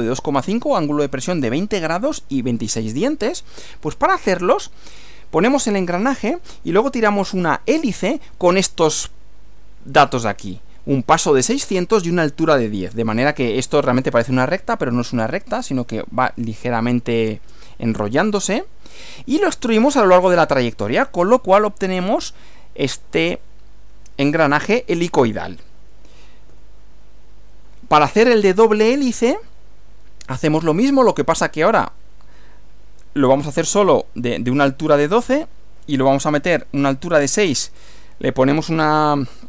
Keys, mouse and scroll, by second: 3.6 Right, 19.6 Right, 26.5 Right.